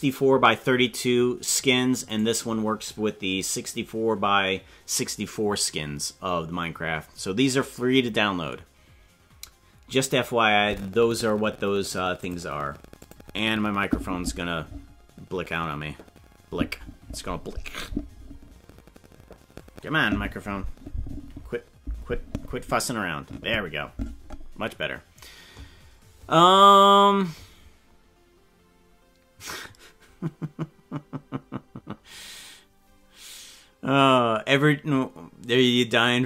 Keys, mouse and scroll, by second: 2.2 right click, 12.2 click, 13.0 click.